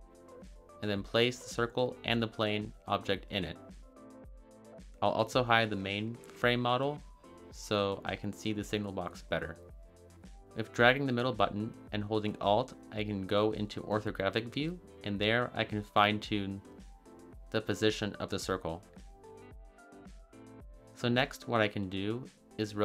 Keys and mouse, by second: 2.5 click, 7.1 click, 10.5-15.0 middle drag, 16.3 shift+middle drag, 17.2 click, 18.1 g, 18.7 z, 20.8 click, 22.7-22.8 middle drag.